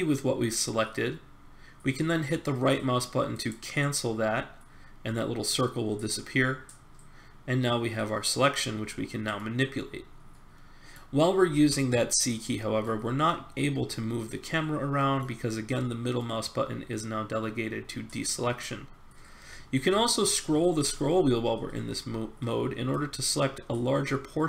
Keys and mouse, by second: 3.4-5.4 drag, 9.3 middle click, 10.3 middle click, 10.7 middle click, 11.5 c.